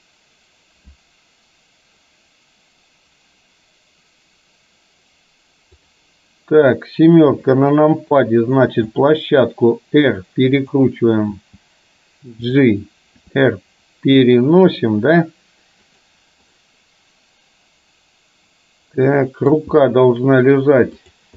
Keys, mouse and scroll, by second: 5.8-6.5 drag, 7.4 KP_7, 8.9 r, 11.5 g, 13.3 r, 16.7-19.7 middle drag, 21.0 click.